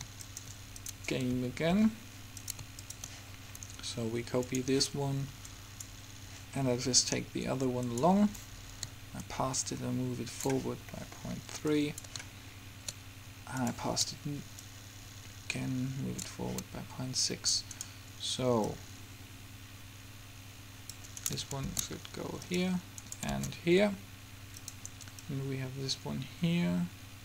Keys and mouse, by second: 0.2 middle click, 0.4-7.3 drag, 1.6 a, 1.9 a, 8.2-11.1 drag, 11.1 middle click, 11.9-16.6 drag, 17.4 click, 21.3-25.1 right drag, 21.8 shift+d, 23.4 shift+d, 25.3-26.6 drag, 27.0 click.